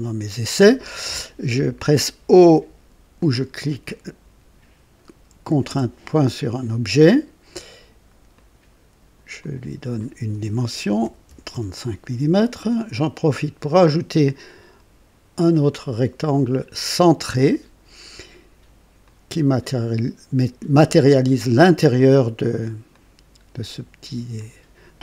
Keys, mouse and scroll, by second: 5.6 o, 8.3 click, 9.4 click, 11.0 KP_3, 11.3 KP_5, 11.5 Return, 13.6 click, 17.3 click, 19.0 click, 19.7 right click, 21.2 right click, 21.9 right click, 22.9 click, 24.3 click.